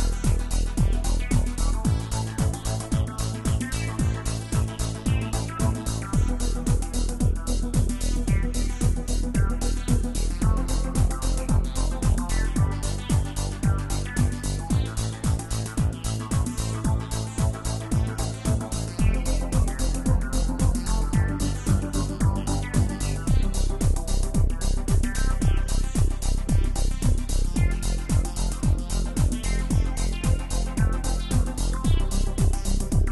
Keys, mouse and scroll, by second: 0.5-1.9 middle drag, 1.9 g, 6.3 r, 12.1-15.8 middle drag, 17.2-18.8 drag, 19.2-19.8 drag, 19.8-20.6 scroll up 3, 20.6-21.6 right drag, 21.6-22.3 middle drag, 22.3-22.7 scroll down 2, 22.7-24.1 middle drag, 24.1 click, 26.0-29.1 drag, 29.4-33.1 drag.